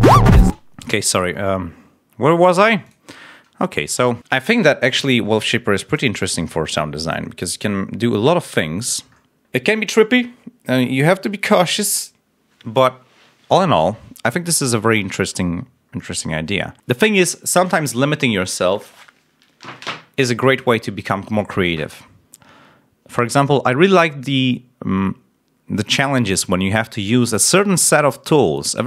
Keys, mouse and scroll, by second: 0.4 space, 2.8 click, 3.1-3.5 scroll up 1, 5.8 click, 6.2-6.5 scroll down 2, 7.3 click, 7.9-8.3 scroll up 2, 8.5-9.0 scroll up 2, 9.1 scroll up 2, 15.1-16.1 scroll down 3, 16.3 scroll up 2.